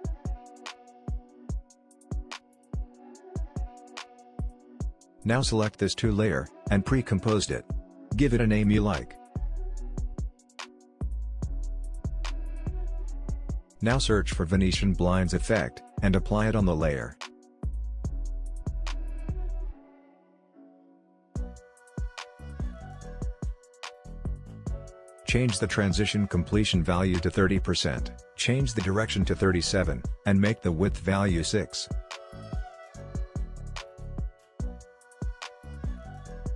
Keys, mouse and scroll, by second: 5.1 shift+click, 5.7 right click, 6.6 click, 7.4-8.8 typing, 9.2 Return, 10.2 click, 13.2 click, 13.9-14.4 typing, 16.0-19.8 drag, 19.9-25.6 drag, 25.6-34.3 drag.